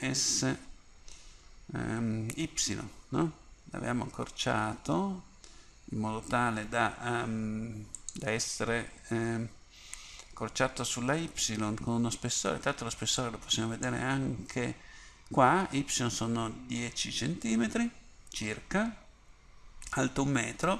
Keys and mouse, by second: 0.1 s, 13.3-20.7 drag.